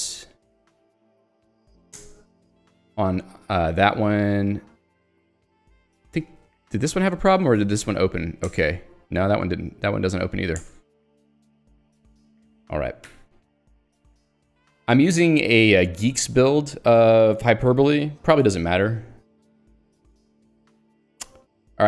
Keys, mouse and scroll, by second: 0.0 Escape, 0.5 l, 2.0 alt+Return, 3.2 j, 6.0 k, 7.5 shift+i, 8.0 h, 8.5 alt+Return, 9.5 h, 11.1 alt+Return, 11.6 ctrl+d, 13.1 ctrl+u, 14.1 ctrl+d, 17.3 Escape, 20.0 k.